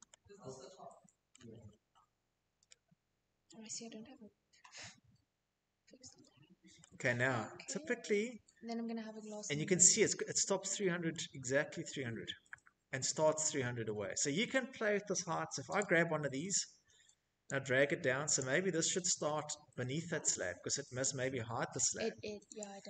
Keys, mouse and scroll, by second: 1.5 middle click, 4.8-5.5 shift+middle click, 5.1 middle click, 5.2-5.5 scroll, 7.0 middle click, 8.2 middle click, 8.3 middle click, 8.5 middle click, 8.6 middle click, 11.1-14.3 shift+middle click, 11.9 middle click, 12.0 scroll, 12.6 scroll, 13.8 click, 14.3 click, 14.3 middle click, 14.4 middle click, 16.4 click, 18.8 Escape, 19.3 scroll, 20.6 click.